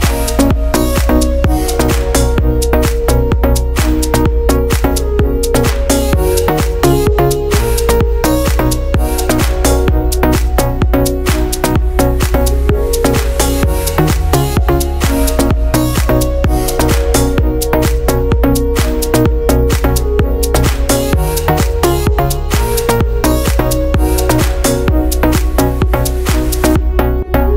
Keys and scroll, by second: 5.4 ctrl+z, 11.4 ctrl+z, 12.1 ctrl+z, 14.4 ctrl+z, 17.2 ctrl+z, 26.2 ctrl+z.